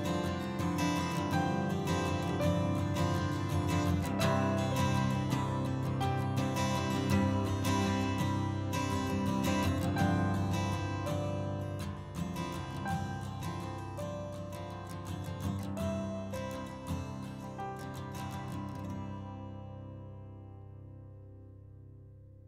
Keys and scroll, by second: 6.4 ctrl+z.